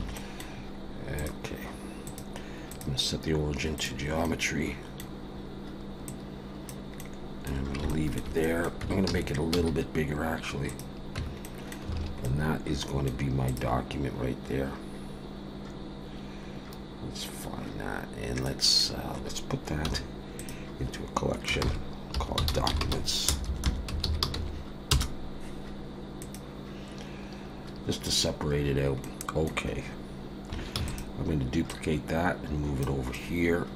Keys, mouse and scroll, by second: 0.1 middle click, 0.7-1.1 scroll down 1, 1.1 click, 2.0 click, 4.2 middle click, 6.1 click, 7.0 middle click, 8.4 middle click, 8.8 Tab, 9.1 a, 9.5 s, 11.2 Tab, 11.4 middle click, 12.0 alt+a, 12.2 middle click, 13.5 click, 14.9 scroll down 1, 18.4 middle click, 19.8 m, 23.5 BackSpace, 28.0 click, 28.7 scroll down 1, 29.0 middle click, 30.7 shift+d, 31.7 click, 33.1 middle click.